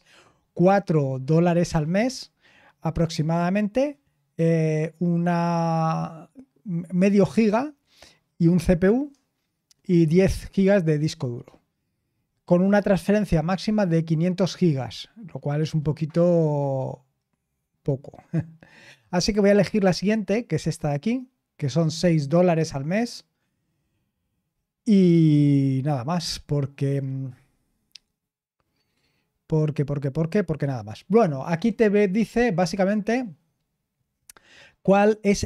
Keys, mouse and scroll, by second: 20.0 click, 24.5 scroll down 2, 25.7-28.7 scroll down 4, 28.7-29.4 scroll down 1, 29.4-30.1 scroll up 2, 30.1-34.4 scroll down 3, 34.4-35.4 scroll down 1.